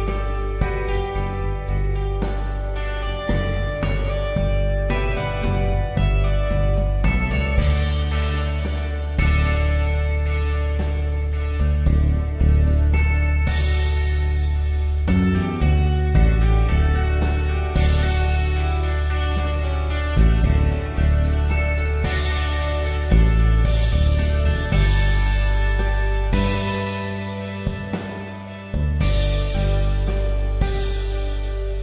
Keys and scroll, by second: 0.1 v, 0.4 space, 7.0 space, 12.4 ctrl+t, 16.7 Return, 18.0 ctrl+t, 22.3 Return.